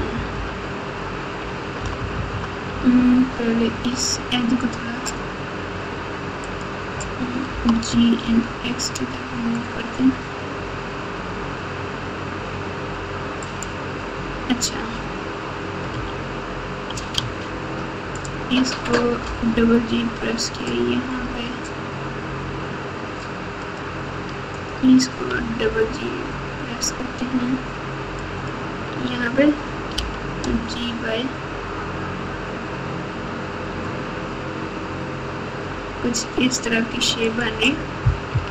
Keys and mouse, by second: 0.1 KP_8, 0.3 KP_8, 1.8 KP_Add, 2.0 KP_Add, 2.1 KP_Add, 2.3 KP_Add, 3.7 2, 7.5 g, 15.9 2, 17.2 1, 19.2 g, 25.3 g, 29.9 g, 38.3-38.5 typing.